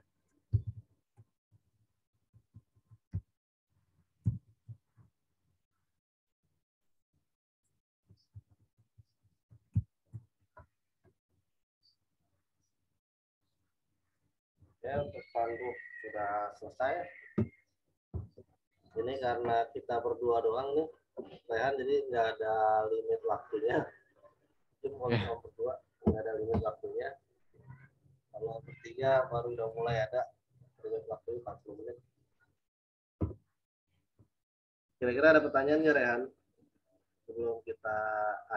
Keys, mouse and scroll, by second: 0.5-1.8 typing, 4.2 typing, 4.9 Return, 6.7 click, 8.0-9.4 typing, 10.1 Return, 13.5 click.